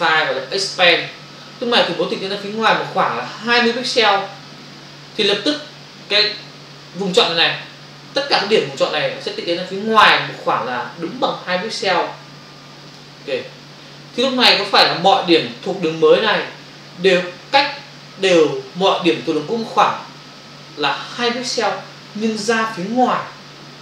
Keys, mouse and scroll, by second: 0.9 click, 1.9 click, 12.8 click.